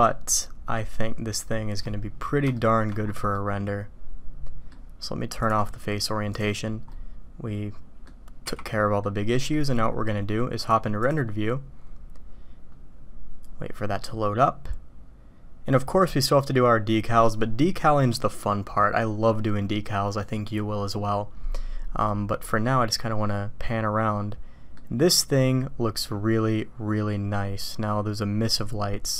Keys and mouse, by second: 2.5-2.9 shift+drag, 3.3-4.7 middle drag, 5.5-6.5 drag, 6.9-8.0 drag, 8.6-9.0 drag, 9.3 click, 10.6 click, 11.1 click, 22.1-24.7 drag, 26.1-28.7 drag, 28.9 click.